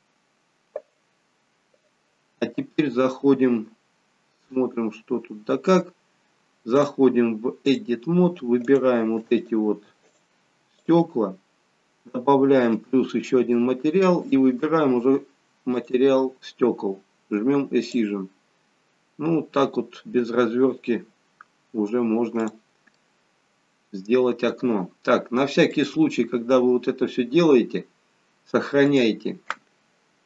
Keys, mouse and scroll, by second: 0.1-0.6 scroll up 1, 3.9-4.6 scroll up 1, 4.6 scroll up 1, 4.7-5.5 scroll down 2, 6.8 click, 9.5 shift+click, 10.2 shift+click, 12.0 shift+click, 12.8 click, 18.0 click, 19.9-20.5 scroll down 4, 21.6-22.4 scroll down 1, 22.4 scroll down 2, 22.6 click, 23.1 middle click, 25.8 click.